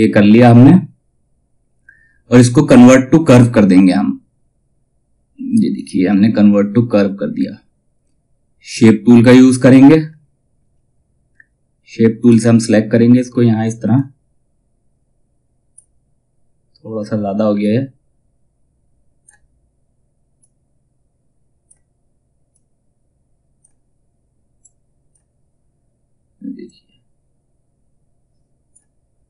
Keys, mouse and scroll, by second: 2.9 right click, 5.2 click, 8.3 click, 10.7 typing, 11.7-29.2 drag.